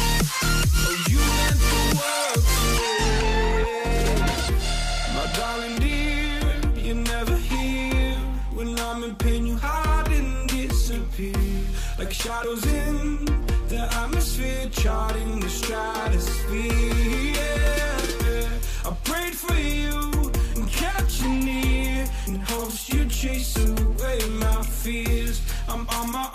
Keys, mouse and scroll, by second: 0.3 Down, 0.4 Down, 1.0 Right, 1.2 Right, 1.8 Down, 2.0 Right, 2.3 Right, 3.1 Down, 3.1 Right, 3.4 Right, 3.9 Up, 4.2 Right, 9.0 alt+scroll down 1, 10.7 ctrl+ت, 11.4 ctrl+ف, 12.0 right click, 13.7 Return, 14.3 right click, 14.7 double click, 16.4 alt+scroll down 1, 16.6 space, 17.3 right click, 19.1 double click.